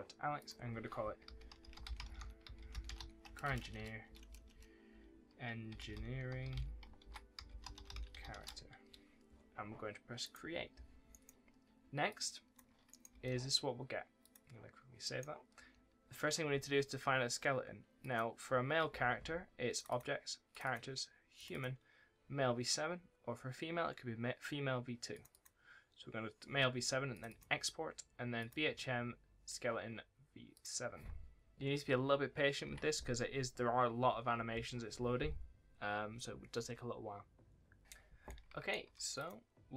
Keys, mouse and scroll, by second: 11.0 right click, 12.0 click, 12.8 right click, 13.0 w, 14.1 click, 15.5 w, 17.9 click, 38.1 click, 38.4 scroll down 1, 38.5 s, 39.1 click.